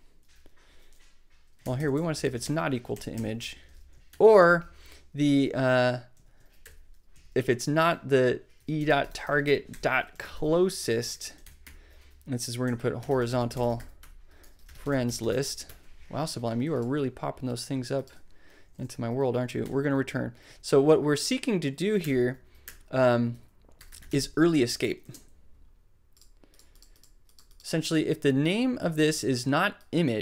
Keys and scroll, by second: 2.5 alt+shift+Tab, 2.8 shift+super+i, 2.9 shift+super+Right, 3.6 super+Left, 3.6 space, 4.1 shift+\, 5.4-15.8 typing, 18.7 super+Right, 19.6 super+Return, 20.4 Tab, 22.0 BackSpace, 23.1-24.5 typing, 24.7 super+n, 25.0 super+Left.